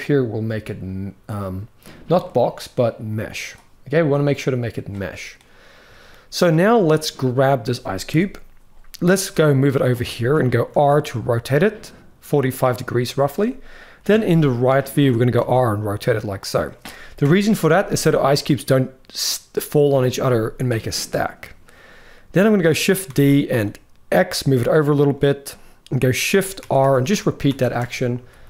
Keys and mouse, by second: 1.9-3.0 drag, 5.1-5.8 middle drag, 7.0-7.8 drag, 7.8 KP_1, 8.9 g, 9.8 shift+middle click, 10.4 r, 13.8 KP_3, 14.6 shift+middle drag, 15.1 r, 16.9 KP_1, 22.3 shift+middle click, 22.8 shift+d, 26.3-28.4 typing.